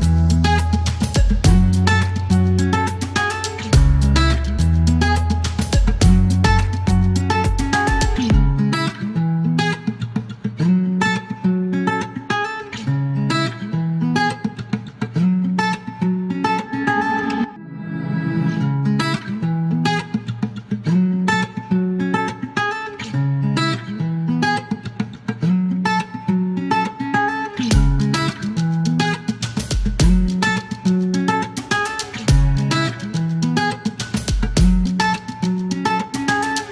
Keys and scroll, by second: 22.1 alt+u, 22.3 shift+s, 26.3 KP_1, 33.9 alt+u, 34.1 alt+m, 35.9 e.